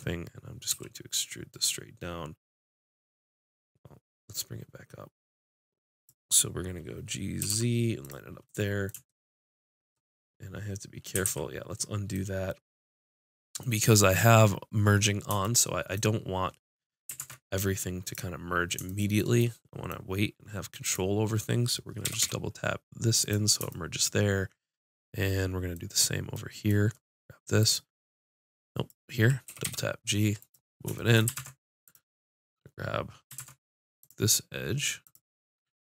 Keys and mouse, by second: 0.7 e, 6.7-8.0 drag, 7.4 g, 8.0 click, 11.2 ctrl+z, 17.1 ctrl+Tab, 20.8-21.9 drag, 21.9 right click, 22.0 g, 23.7 click, 24.8 click, 25.5 click, 27.6-30.3 drag, 29.4 g, 30.4 click, 31.3 ctrl+Tab, 33.3 ctrl+Tab, 35.2-35.8 drag.